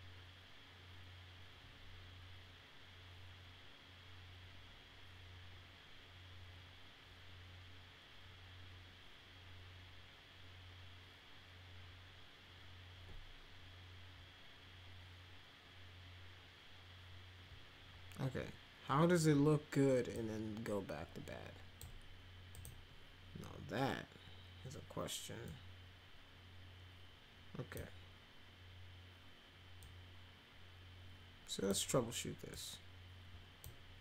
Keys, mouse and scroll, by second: 20.1-21.8 drag, 22.5 click, 25.4-27.7 drag, 29.8-31.6 drag, 32.5-33.6 drag.